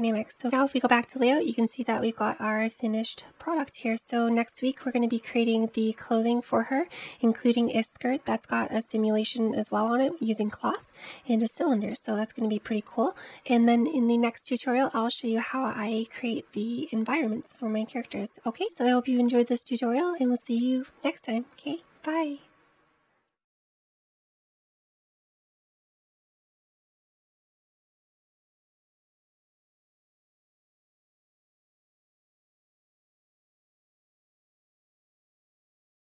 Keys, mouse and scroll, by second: 1.4-3.2 scroll down 1, 3.2 drag, 3.9 scroll up 1, 5.2-6.8 scroll down 1, 6.8-9.4 scroll down 1, 9.4-9.7 scroll down 1, 15.8-19.4 shift+middle drag, 20.8-23.0 middle drag.